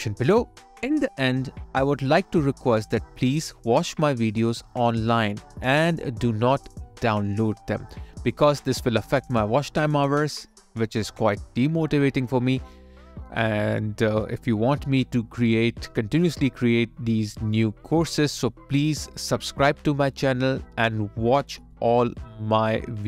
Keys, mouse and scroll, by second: 4.8 alt+click, 5.9 alt+right click, 8.0 alt+click, 13.6 alt+right click, 16.8 alt+middle click.